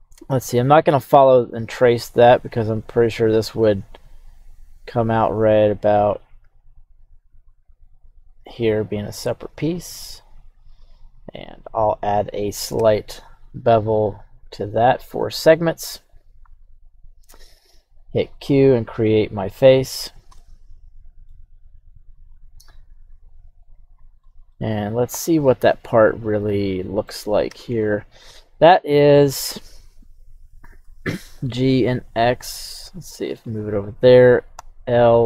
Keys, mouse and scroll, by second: 18.2-20.1 drag, 20.4 middle click, 22.5 e, 23.9 click, 24.2 scroll down 1, 24.5-27.1 middle drag, 27.5 KP_1, 30.8 g, 31.2 x, 33.6 click, 34.5 l.